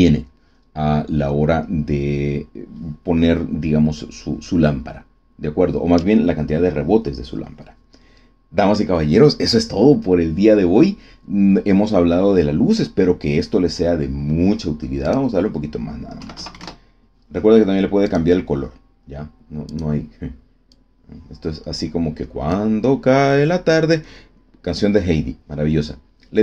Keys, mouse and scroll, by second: 15.0 click, 16.1 KP_2, 16.3 KP_Decimal, 16.4 KP_5, 16.5 KP_Enter, 18.0 click, 19.6 click, 20.6-22.6 drag.